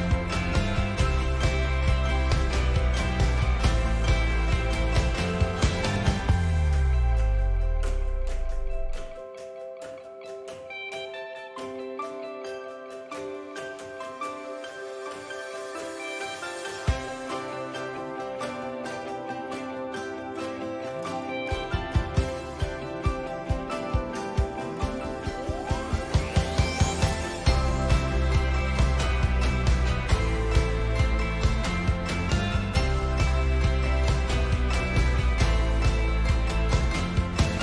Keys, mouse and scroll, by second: 10.7-18.1 drag, 10.7-17.7 middle drag, 10.7-17.7 right drag, 15.9 n, 18.1 middle click, 18.1-26.7 right drag, 18.1 g, 19.2 g, 21.1 click, 21.4-22.0 middle drag, 22.1-24.0 drag, 22.1 middle click, 25.9 click, 25.9 middle click, 26.1 click, 26.7-27.8 middle drag, 27.7 click, 27.7 right click, 28.5 shift+middle click, 28.6-29.4 shift+drag, 29.5-30.1 right drag, 30.1-37.6 drag, 33.5 F12.